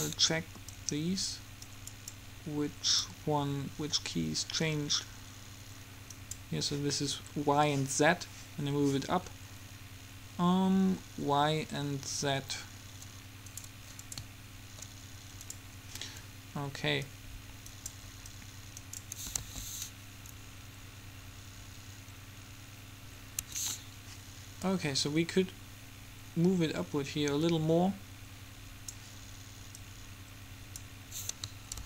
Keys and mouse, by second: 1.0-2.5 drag, 3.2-4.8 drag, 13.7-17.6 drag, 19.5 alt+a, 23.6 Escape, 24.9-25.9 drag, 29.9-31.7 drag.